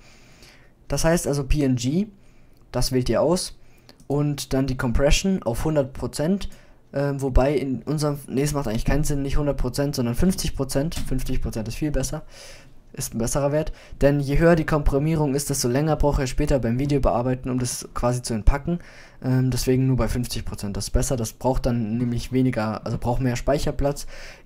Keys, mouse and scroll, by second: 4.9-6.9 drag, 7.8-9.8 middle drag.